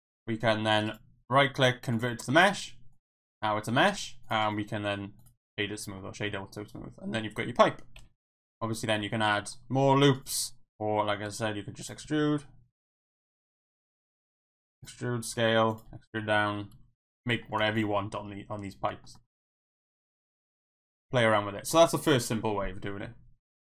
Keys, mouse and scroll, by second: 1.0-2.0 right drag, 3.2 Tab, 3.9 Tab, 4.2 click, 4.5-5.2 right drag, 5.9-7.2 middle drag, 8.0 KP_1, 8.3 Tab, 9.1 ctrl+r, 11.2 e, 11.2 z, 11.8 click, 12.0 s, 12.9 right click, 13.6 ctrl+z, 14.4-16.7 typing, 15.7 click, 17.1 click, 17.4 shift+middle click, 17.6 Tab, 18.0-18.9 middle drag, 19.0 shift+middle drag, 19.2 middle drag, 19.6 shift+middle drag, 20.3-21.1 middle drag.